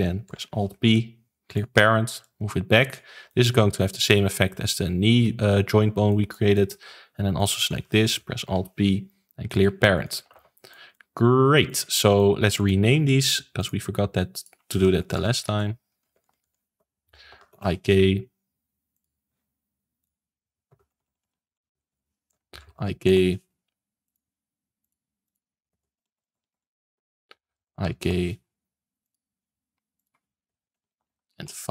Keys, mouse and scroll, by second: 0.2 alt+p, 2.2 click, 3.2 shift+middle click, 3.6 scroll down 2, 3.8-6.8 middle drag, 6.8-7.3 scroll up 2, 7.3 click, 8.4 alt+p, 9.9 click, 10.2 ctrl+s, 10.5-12.5 shift+middle drag, 12.5 click, 13.5 click, 14.3-15.3 drag, 15.3 BackSpace, 16.2 Left, 18.9 click, 20.0-21.0 drag, 21.0 BackSpace, 21.2 BackSpace, 21.9 Left, 24.0 click, 24.8 click, 25.2 click, 26.1 BackSpace, 26.5 BackSpace, 26.8 Left, 29.0 click, 29.9 click, 30.9 BackSpace, 31.0 BackSpace.